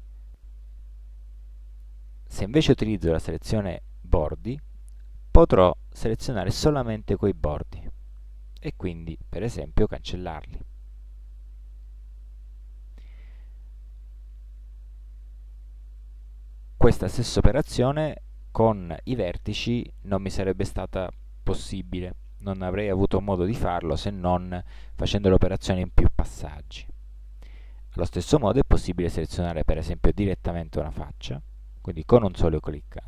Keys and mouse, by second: 0.7 ctrl+Tab, 4.6-8.4 middle drag, 8.5-10.5 middle drag, 9.4 x, 11.5-13.2 middle drag, 23.9 ctrl+z, 27.0 middle click, 28.0 ctrl+Tab.